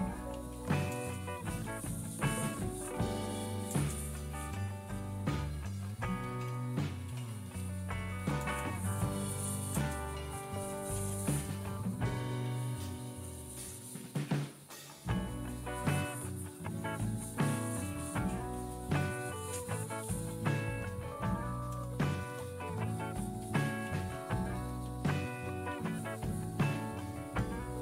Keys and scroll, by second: 0.0-14.6 typing, 15.7 typing, 17.2-20.7 typing, 21.6 Return, 22.7-25.9 typing.